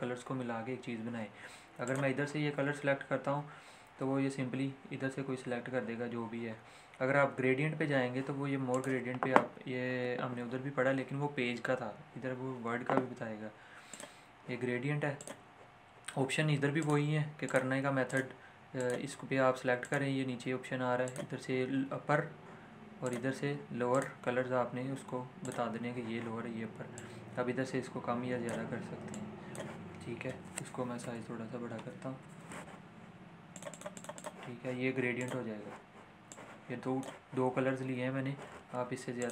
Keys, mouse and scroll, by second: 1.9 click, 9.2 click, 13.9-30.9 drag, 30.9 ctrl+shift+., 33.6-39.2 drag.